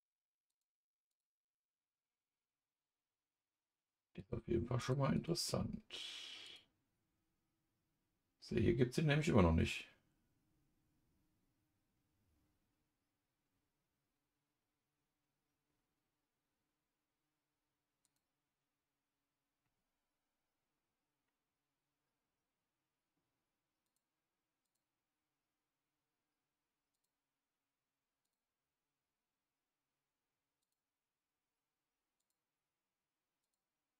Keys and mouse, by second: 0.5 click, 4.8 click, 5.1-6.5 drag, 18.0 click, 23.8 click, 24.6-27.0 drag, 28.2-30.7 drag, 32.2 click, 33.4 click.